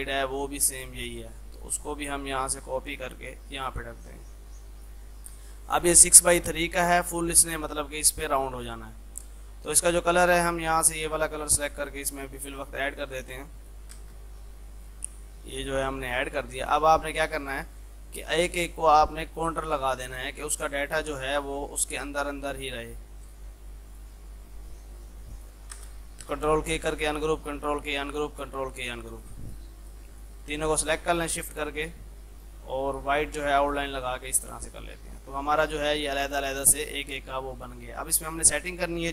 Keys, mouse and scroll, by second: 3.5 ctrl+right click, 4.2-6.6 drag, 6.6 F3, 7.1-9.7 drag, 11.8 click, 13.8-14.5 typing, 15.5 right click, 16.0 click, 16.2 F2, 16.4-25.8 drag, 25.8 space, 26.8 click, 27.5 ctrl+k, 28.0 click, 28.3 ctrl+k, 28.8 click, 30.6 ctrl+z, 31.6 right click, 33.6 click, 35.1 F3, 35.5-37.5 drag.